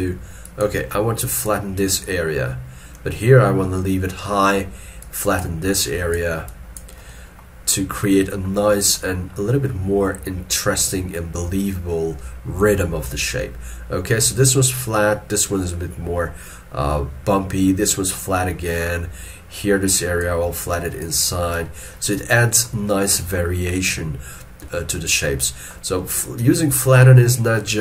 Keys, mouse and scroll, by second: 1.8 double click, 7.1 middle click, 7.7 scroll down 1, 18.5 middle click, 22.4 middle click, 26.0 middle click, 26.8 shift+middle click, 27.2 shift+middle click.